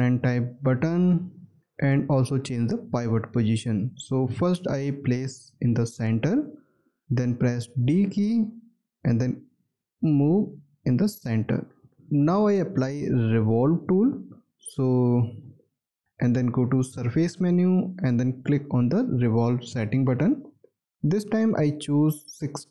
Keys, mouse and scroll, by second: 7.6 d, 11.9 space, 12.4-12.8 scroll down 1, 13.2 alt+click, 14.0-14.4 scroll down 1, 14.6 alt+click, 15.5 alt+middle click.